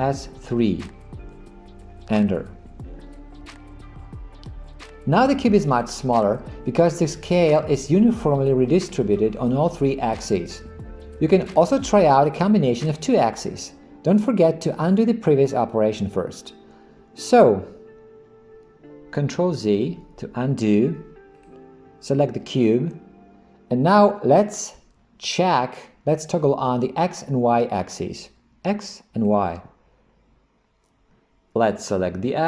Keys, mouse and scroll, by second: 0.0 s, 19.5 ctrl+z, 21.4 click, 29.2 click.